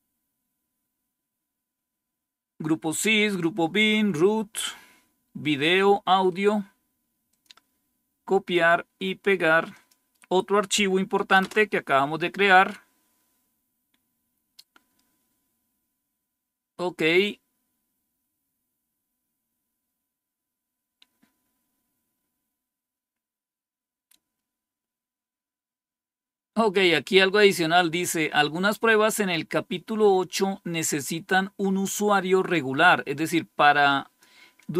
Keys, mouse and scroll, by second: 0.2-4.3 scroll up 1, 4.3-6.2 scroll down 2, 6.2 right click, 7.2 click, 7.5 click, 8.4 right click, 9.6 click, 11.3 Return, 13.2-15.3 scroll down 1, 15.3-15.8 scroll down 1, 15.8-18.3 scroll down 1, 21.7-29.2 scroll down 1, 32.4-34.7 drag.